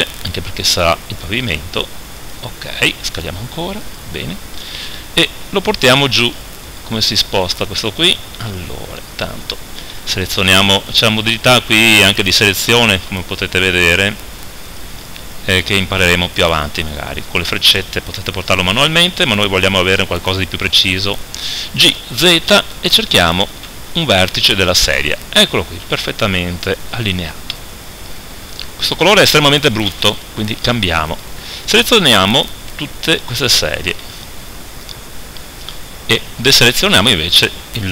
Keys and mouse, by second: 0.2 s, 3.1 s, 4.9 KP_1, 5.3 KP_3, 17.8-19.5 drag, 21.7 g, 25.9 z, 29.8-31.1 middle drag, 31.1-34.1 right drag, 34.1-36.5 middle drag, 34.1 b, 36.5-37.9 right drag.